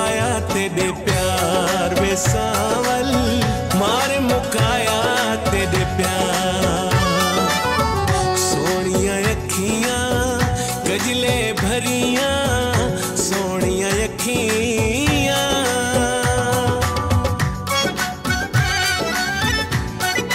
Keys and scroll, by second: 10.0 ctrl+s, 12.0 ctrl+a, 14.5-15.4 typing, 15.8 ctrl+z, 16.5 space, 17.1 b, 18.1 ctrl+z, 18.8 space, 20.2 space.